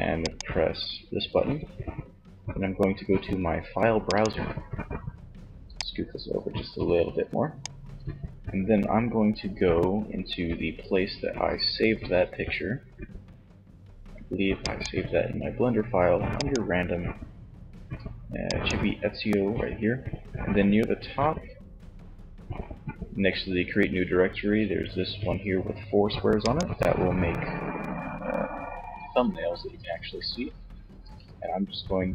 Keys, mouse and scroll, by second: 5.9 click.